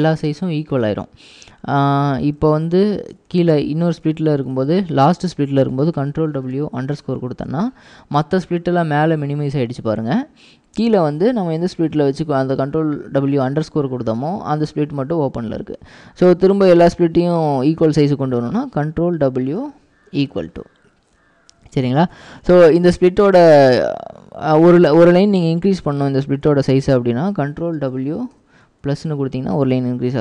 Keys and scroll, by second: 2.5 j, 2.7 j, 3.4 ctrl+w, 3.7 j, 4.3 ctrl+w, 4.7 j, 6.2 ctrl+w, 6.5-7.1 typing, 19.4 ctrl+w, 20.3 =, 27.8 ctrl+w.